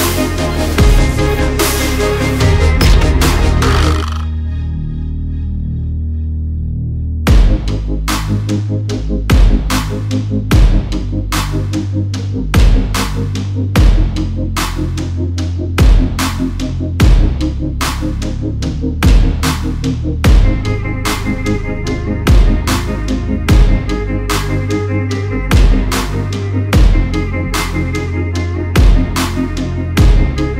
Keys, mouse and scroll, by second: 0.0 alt+click, 1.5 alt+click, 1.6 alt+click, 3.3 alt+click, 4.6 alt+scroll up 1, 5.2 click, 8.3 alt+click, 9.3 click, 15.2 click, 19.5 click, 21.7 click, 21.9 alt+scroll down 1, 22.9 click, 23.8 alt+scroll up 1, 25.3 click, 26.2 alt+scroll up 1, 26.5 click, 27.5 alt+scroll, 27.6 alt+scroll down 1, 28.2-30.5 typing, 29.9 Return.